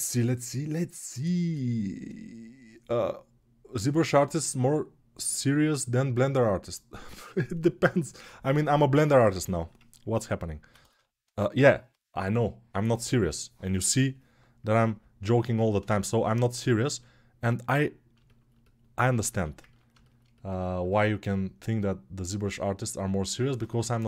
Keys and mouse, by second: 10.0-19.4 alt+shift+right drag, 19.4-22.5 ctrl+alt+drag, 22.5-24.0 middle drag.